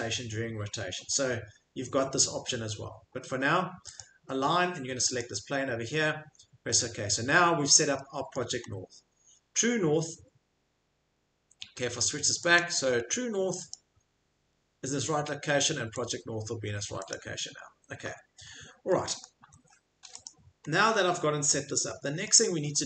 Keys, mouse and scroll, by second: 4.0 click, 5.1 click, 6.8 click, 7.6 middle click, 7.7 middle click, 8.3-8.8 scroll, 12.6 click, 13.7 click, 16.0 click, 17.1 click, 18.0 Escape, 18.4 middle click, 19.2 middle click, 19.4 Escape, 20.3 click, 20.5 middle click, 20.6 middle click, 22.3 middle click.